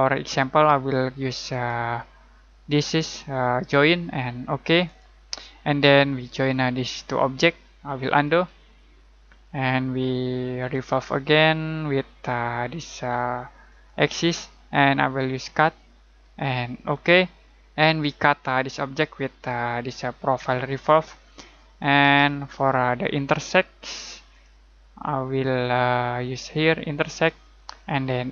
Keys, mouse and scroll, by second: 1.5 click, 4.8 click, 8.2 z, 10.5 click, 13.6 click, 22.1 z, 24.3 click.